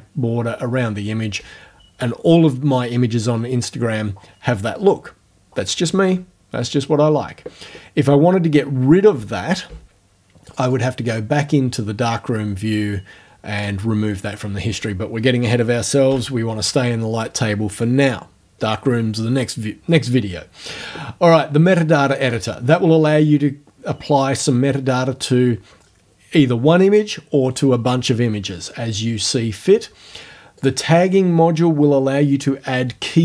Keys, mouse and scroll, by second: 6.1 f, 10.5 click, 13.6 click, 16.1 l, 21.6 click, 30.6 click.